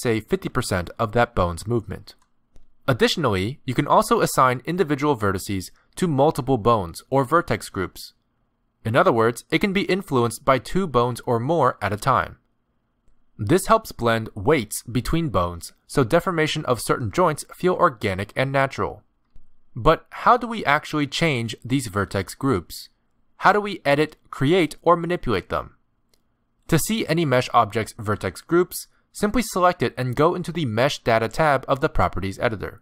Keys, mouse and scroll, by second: 4.7-5.1 scroll down 2, 5.1 middle click, 5.4-5.9 scroll up 1, 6.3 ctrl+click, 8.3 ctrl+click, 10.2 ctrl+click, 11.2 r, 11.9 ctrl+click, 12.2 r, 13.5 scroll down 4, 15.0 ctrl+click, 15.3-16.1 scroll up 3, 16.1 g, 18.7 ctrl+click, 19.0-19.4 scroll up 2, 19.9 ctrl+click, 21.2 ctrl+click, 30.0 click.